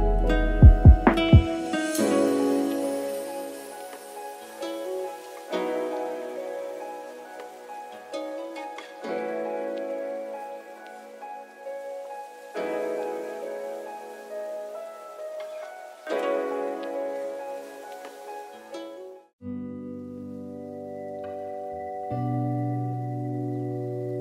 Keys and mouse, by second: 0.3-2.2 drag, 3.5 click, 4.4-6.1 shift+drag, 7.5 click, 8.0 click, 8.4-9.7 shift+middle drag, 10.4 shift+middle click, 11.7 a, 14.5 s, 16.8 r, 20.0 shift+middle click, 20.9 shift+middle click, 21.8 shift+middle click, 22.5 click, 23.1 click, 23.4-24.0 middle drag.